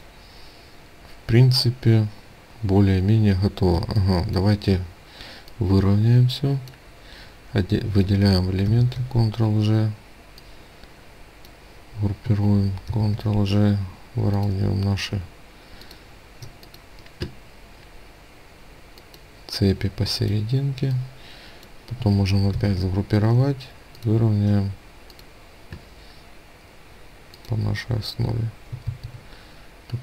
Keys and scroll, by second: 8.0 ctrl+g, 12.3 ctrl+g, 21.9 ctrl+g, 28.2 ctrl+z.